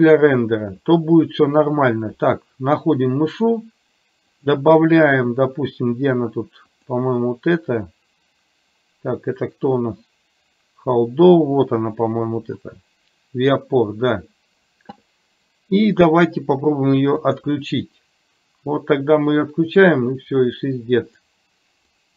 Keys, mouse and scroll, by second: 4.5-14.8 drag, 17.4 click.